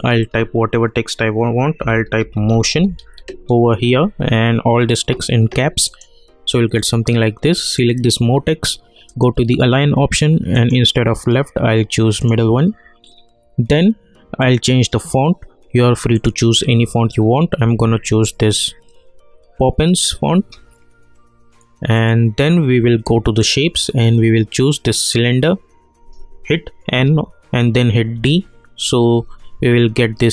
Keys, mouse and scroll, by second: 1.5-3.5 typing, 5.9 click, 14.4 click, 17.0-17.8 scroll down 1, 21.9-25.0 drag, 26.9 n, 28.1 d.